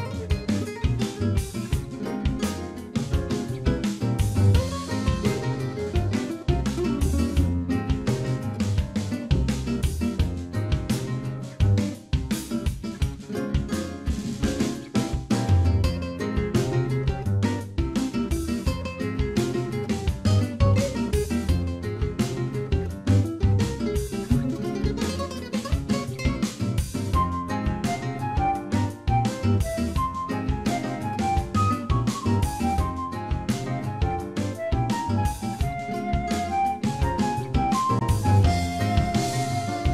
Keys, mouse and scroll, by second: 0.3 shift+click, 1.5 alt+m, 3.2 middle click, 5.8 click, 6.6 shift+click, 7.6 j, 8.7 click, 9.7 shift+click, 10.5 j, 10.8 scroll down 1, 11.4 shift+middle click, 11.4 scroll down 6, 11.8 middle click, 14.1 shift+middle click, 16.0 middle click, 17.9 shift+middle click, 18.2 scroll up 1, 19.0 click, 19.0 scroll up 4, 19.4 shift+click, 20.6 ctrl+b, 23.2 click, 23.6 shift+click, 24.6 alt+m, 25.7 middle click, 26.3-26.8 scroll down 4, 26.6 middle click, 27.6 Tab, 27.9 scroll down 4, 28.2 shift+middle click, 28.7 middle click, 29.7-30.4 scroll up 3, 30.1 middle click, 30.5 middle click, 30.9-32.5 scroll up 2, 31.4 middle click, 32.6 middle click, 33.3 shift+middle click, 34.8 click, 36.2 ctrl+a, 37.5 click.